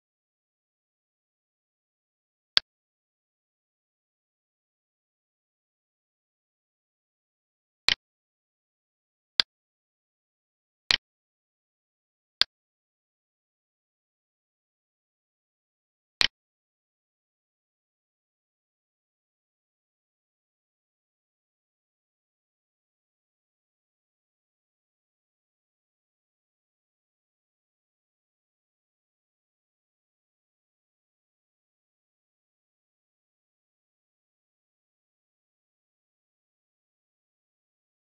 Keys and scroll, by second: 20.8 alt+e, 31.8 alt+e.